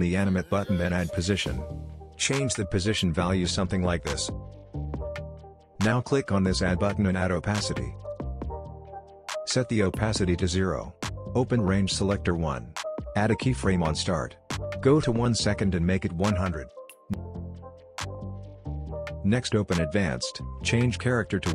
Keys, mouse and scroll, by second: 17.6 space, 18.2 scroll down 1, 19.6-21.5 drag.